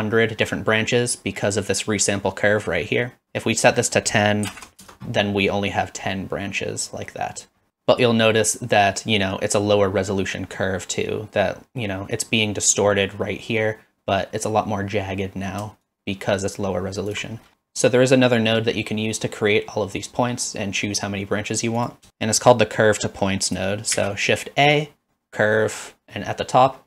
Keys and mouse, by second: 3.6-5.1 drag, 15.9-17.1 shift+drag, 21.8 click, 22.1 shift+a, 24.0 shift+a.